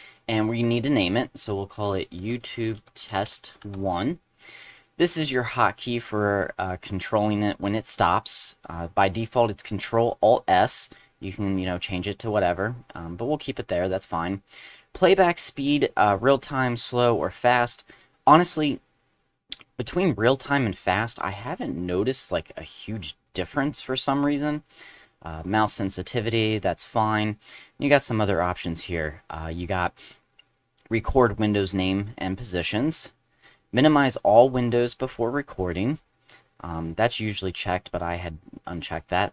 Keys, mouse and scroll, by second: 1.9-3.6 typing, 10.8 click, 12.4 click, 22.1-22.8 drag, 23.3 click, 36.7 click.